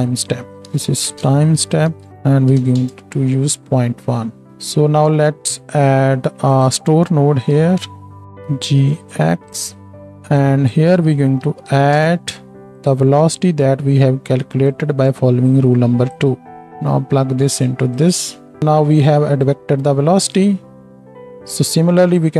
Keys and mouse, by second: 2.1-4.5 drag, 4.5 ctrl+space, 4.5-16.4 right drag, 4.8-8.2 middle drag, 6.5 click, 7.4 shift+d, 8.4 g, 10.0-12.9 drag, 11.8 d, 14.7-16.4 drag, 14.7-16.4 middle drag, 18.6 click, 18.6 middle click, 18.6 right click, 21.1 click, 21.1 middle click, 21.1 right click.